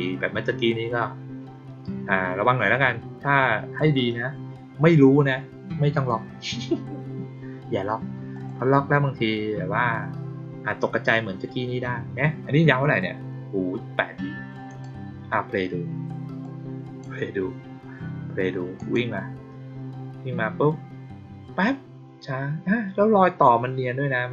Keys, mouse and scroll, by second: 8.2 click, 14.6 click, 16.3-16.9 drag, 18.7 click.